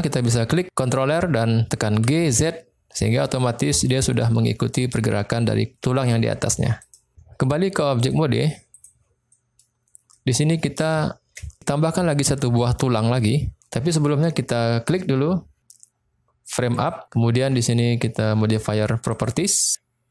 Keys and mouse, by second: 0.9 click, 2.0 g, 2.4 z, 6.7 click, 8.0-8.8 drag, 9.3-9.6 middle drag, 10.0-10.4 middle drag, 10.9-11.4 shift+middle drag, 16.7 click, 19.2 click.